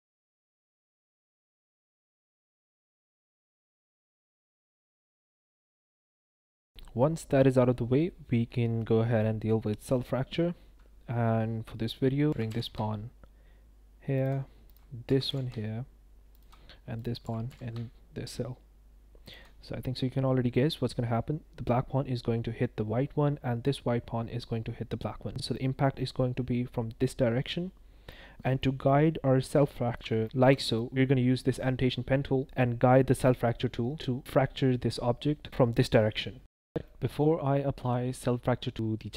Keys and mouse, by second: 0.6-5.9 typing, 1.6 click, 3.6 click, 3.7 click, 4.6 click, 5.9 middle drag, 6.7 click, 12.3 g, 12.4 y, 14.1 ctrl+click, 14.6 click, 15.0 g, 15.2 y, 16.3 ctrl+click, 17.0 click, 17.2 g, 17.4 y, 25.3 drag, 27.3 shift+drag, 27.7 drag, 28.5 shift+middle click, 29.6 shift+middle drag, 30.2 shift+middle click, 30.6 middle click, 36.5 shift+middle drag, 36.8-37.2 middle drag.